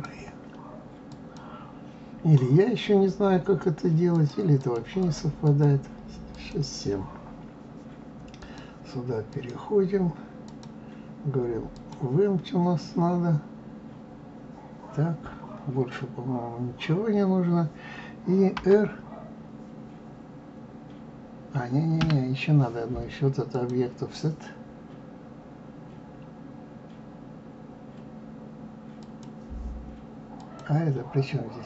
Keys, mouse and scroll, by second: 4.2-7.0 drag, 8.4 click, 9.3 click, 10.5-13.5 drag, 15.9-16.6 scroll down 2, 18.5 r, 23.5 click, 29.0 click, 30.4 click.